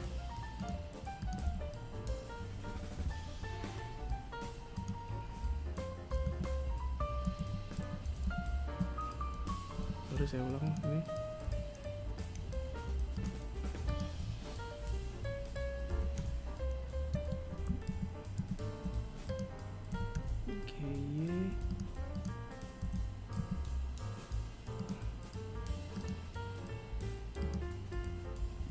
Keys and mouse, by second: 4.5 KP_3, 5.6 z, 6.0 z, 7.1 z, 8.0 z, 8.9 right click, 9.7 g, 12.1 right click, 12.4 y, 14.1 g, 16.0 z, 16.6 z, 17.5 right click, 18.1 g, 20.3 right click, 21.0 g, 24.1 right click, 25.6 right click, 26.7 g, 28.4 right click.